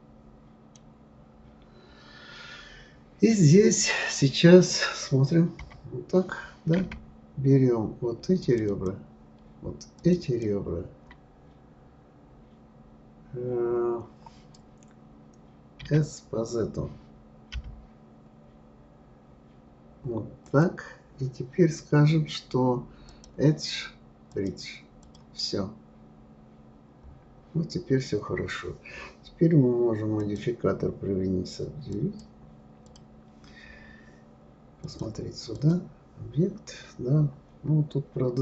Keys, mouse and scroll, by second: 1.2-5.4 scroll up 5, 5.6 KP_1, 8.4 shift+click, 8.7 shift+click, 10.0 shift+click, 10.2 shift+click, 11.3-14.9 scroll down 5, 15.8 s, 23.1-25.1 drag, 26.0-27.6 scroll down 10, 30.2-32.2 drag, 32.8 click, 34.8-37.1 drag, 37.1-38.4 scroll up 6.